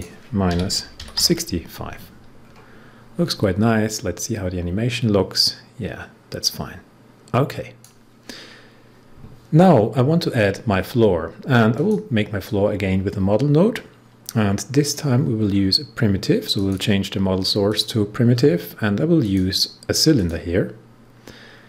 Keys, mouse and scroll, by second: 0.2-1.6 typing, 2.3 scroll down 1, 2.8-3.8 scroll up 1, 3.8-8.4 drag, 8.4 scroll up 1, 11.7-15.4 drag, 15.4 scroll down 1, 16.5 click, 17.6 click, 18.2 scroll down 1, 19.1 click, 20.1 click.